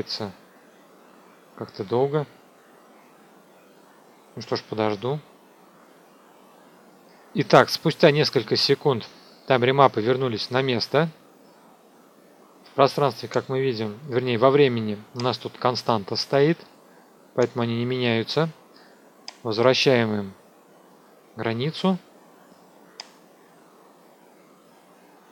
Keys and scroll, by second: 6.3 F2.